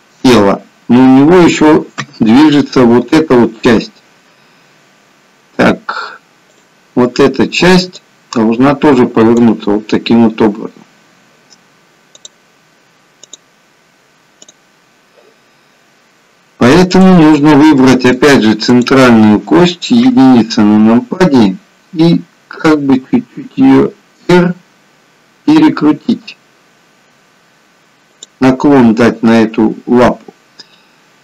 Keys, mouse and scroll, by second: 0.5 middle click, 2.0 KP_1, 16.9 click, 17.8 middle click, 18.6 click, 20.0 KP_1, 23.2 r.